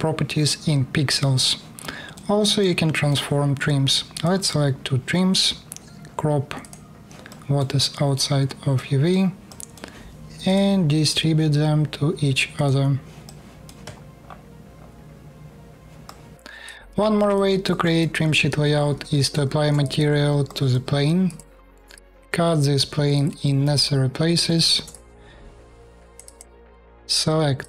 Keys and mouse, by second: 3.9-6.3 drag, 6.3-8.2 middle drag, 9.2-10.4 middle drag, 12.2-14.0 middle drag, 14.6-16.4 middle drag, 17.0-19.0 alt+middle drag, 19.1 shift+KP_4, 21.3 shift+KP_4, 24.3 shift+KP_4, 26.7 click, 27.0 3, 27.4 click.